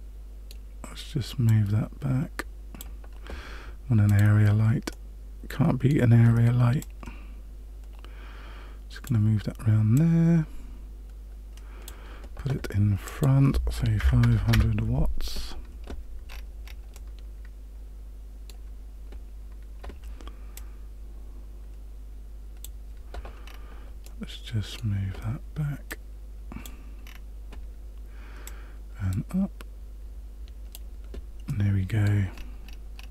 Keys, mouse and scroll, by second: 1.4 click, 4.0 click, 4.9 middle click, 6.8 click, 9.9 click, 13.0 click, 14.3 KP_0, 16.3-16.9 scroll up 7, 16.9 middle click, 20.5 click, 23.5 scroll down 2, 24.0 middle click, 25.9 click, 27.1 scroll down 1, 28.4 click, 31.4 middle click, 32.4-33.1 scroll up 6.